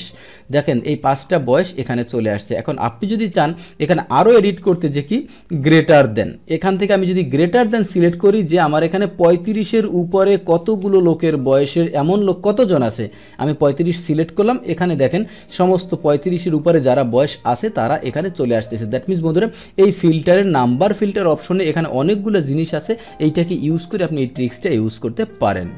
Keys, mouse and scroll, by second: 2.1-3.1 drag, 3.1-7.7 middle drag, 7.7-8.8 drag, 10.8 BackSpace, 12.5 click, 16.2-16.8 scroll down 1, 16.8 scroll down 1, 17.0-18.5 scroll up 1, 18.5 click, 25.2 click.